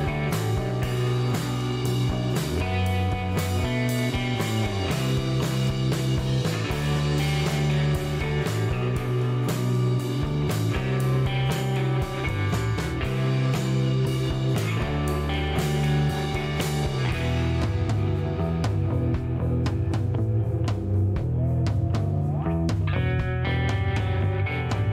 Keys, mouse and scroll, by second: 2.5-5.5 typing, 7.7 KP_4, 8.6 KP_Enter, 11.7-13.8 drag, 15.7 middle click, 15.9 scroll up 1, 17.9 click, 18.9 scroll up 1, 19.8 scroll down 1, 20.0 middle click, 20.5 scroll down 1, 20.8 middle click, 21.9 middle click, 22.5 scroll up 1, 24.0 click.